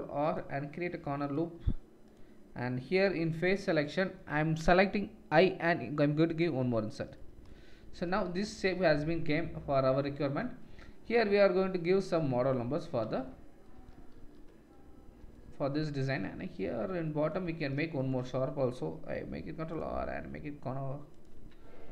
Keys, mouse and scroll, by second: 3.2 3, 6.7 Tab, 8.7 middle click, 9.6 middle drag, 13.1-15.7 middle drag, 14.2 ctrl+s, 17.4 Tab, 19.3 ctrl+r, 21.4 Tab.